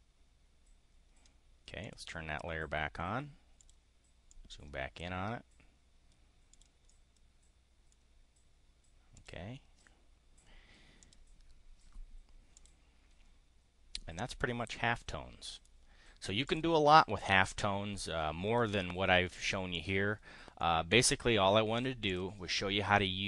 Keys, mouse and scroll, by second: 1.8 click, 3.6 click, 4.1 click, 6.5 click, 6.8-8.0 drag, 9.1 click, 11.0 click, 12.5 click, 14.5-15.7 drag, 16.5 click, 17.1-18.7 drag, 19.7 click, 20.5 click, 21.9 click.